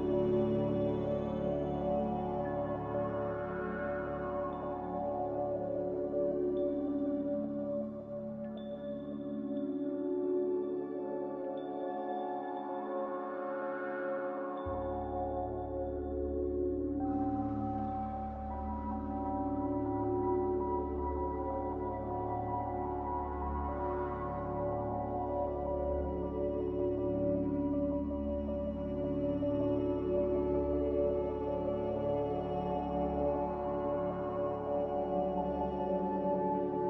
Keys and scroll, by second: 30.3 q, 30.9 q.